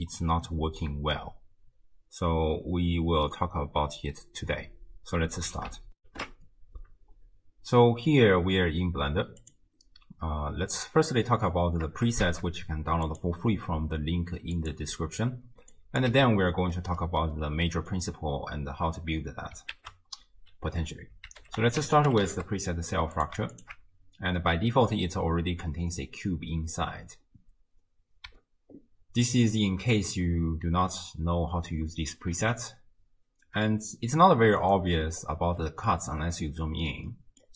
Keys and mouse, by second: 0.2 click, 0.5 middle click, 0.8 click, 1.3 click, 1.9 click, 2.4 click, 2.8 click, 3.5-4.9 drag, 5.3 click, 5.5 click, 5.7 click, 5.9 click, 6.0 ctrl+alt+shift+w, 6.0 ctrl+alt+shift+q, 12.3 shift+a, 14.7 click, 15.7 click, 16.1 x, 17.4-17.9 drag, 19.8 ctrl+a, 21.8 l, 23.6 alt+shift+click, 32.4 ctrl+a, 35.6-36.0 middle drag, 37.3 middle click.